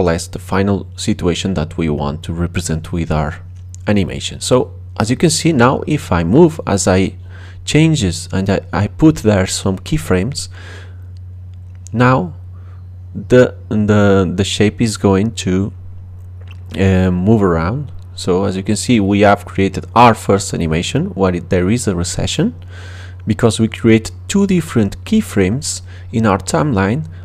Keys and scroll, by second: 5.7 space.